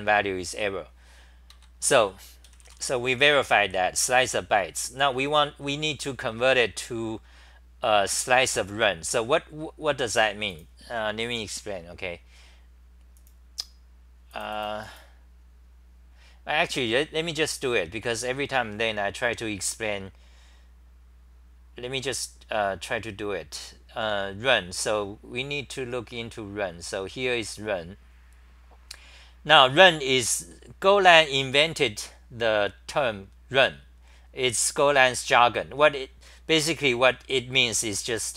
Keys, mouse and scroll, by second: 1.5 ctrl+g, 2.2-3.9 typing.